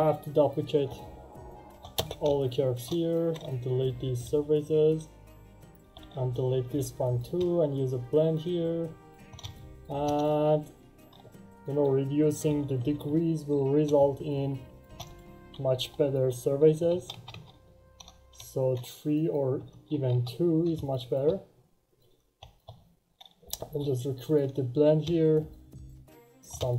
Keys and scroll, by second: 1.9 space, 4.0 Delete, 4.1 Return, 5.7 Delete, 5.9 Return, 12.2 3, 12.3 Return, 16.7 3, 16.8 Return, 19.5 2, 19.6 Return, 23.4 Delete, 23.5 Return.